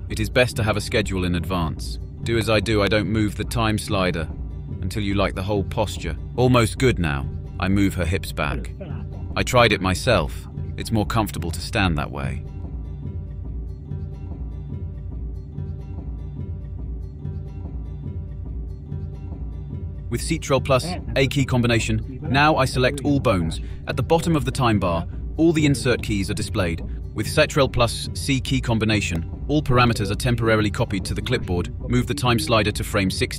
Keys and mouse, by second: 0.0 click, 1.2 click, 1.4 click, 2.0 click, 2.7 click, 3.0 middle click, 3.1 click, 3.4 click, 3.7 click, 3.9 click, 4.3 click, 5.0 click, 5.6 click, 6.2-6.7 drag, 7.0 click, 7.6 click, 7.8 click, 8.0 click, 8.6 click, 9.2 click, 9.6 click, 10.3 ctrl+KP_3, 10.3 KP_1, 10.7 click, 11.0 click, 11.7 click, 12.0 click, 12.3 click, 13.4 click, 13.9 click, 14.4 click, 14.8 click, 15.1 click, 15.7 click, 15.9 click, 16.5 middle click, 16.8 middle click, 17.7 click, 18.1 middle click, 19.3 click, 20.5 click, 21.0 ctrl+z, 21.5 click, 22.0 click, 22.0 typing, 24.4 a, 26.5-28.4 drag, 29.5 ctrl+c.